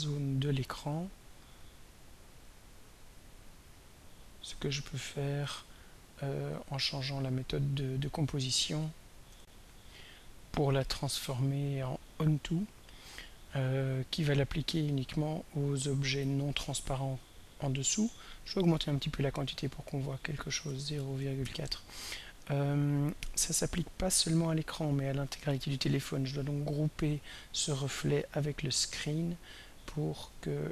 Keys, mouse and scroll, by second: 1.2 click, 2.9 click, 3.3 click, 4.6 click, 6.1 click, 6.7 click, 7.3 click, 9.4 r, 12.1 click, 18.7 click, 19.7 click, 20.4-21.9 typing, 27.2 click, 28.0 shift+click, 28.6 shift+click, 30.5 click.